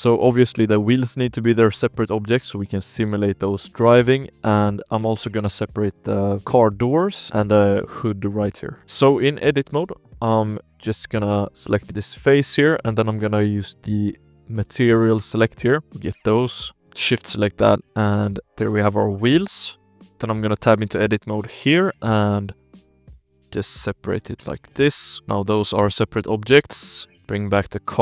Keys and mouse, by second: 0.6-2.6 drag, 4.1 shift+click, 4.4-4.8 drag, 5.0 alt+a, 5.3 shift+click, 5.6 click, 7.1 shift+drag, 8.1 click, 8.7 shift+click, 8.8 Tab, 9.2 alt+a, 9.3 z, 9.9 KP_1, 10.3 z, 10.6 click, 10.7 3, 10.9 click, 11.7 click, 12.0 click, 12.3 shift+click, 13.8 click, 15.0 shift+click, 15.7 z, 16.1 shift+click, 17.4 z, 17.6 shift+click, 17.9 click, 18.6-20.1 typing, 18.8 shift+click, 20.1 Tab, 20.3 click, 20.8 shift+click, 21.4 p, 22.1 click, 23.0 p, 23.5 shift+click, 23.9 click, 24.8 p, 25.2 Tab, 25.2 alt+a, 25.9 shift+click, 26.4 alt+a, 27.2-28.0 typing, 27.6 Tab.